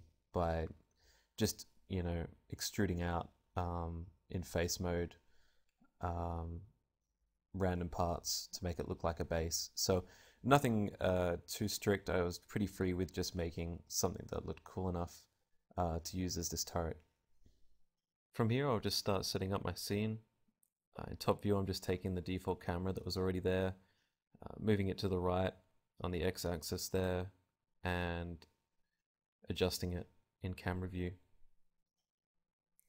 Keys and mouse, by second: 2.8 right click, 3.1 middle click, 3.9-4.9 right drag, 4.3 e, 5.1-7.0 middle drag, 6.2 e, 7.3 Tab, 7.3 click, 7.3 right click, 7.5-8.8 middle drag, 9.8 Tab, 10.3 ctrl+z, 10.5 ctrl+z, 10.7 ctrl+z, 10.8 ctrl+z, 11.0 ctrl+z, 11.7 Tab, 12.6 a, 17.0 right click, 17.7 KP_7, 17.7 KP_5, 18.1 g, 18.7 click, 19.5 click, 19.8 KP_1, 20.0 g, 20.4 click, 20.5 KP_0, 20.8 r, 22.0-24.8 drag, 24.5-27.3 typing, 25.1 click, 25.4 middle click, 25.5 click, 25.5 right click, 29.0 s, 29.7 click, 30.0 g, 31.2 right click, 31.3 click.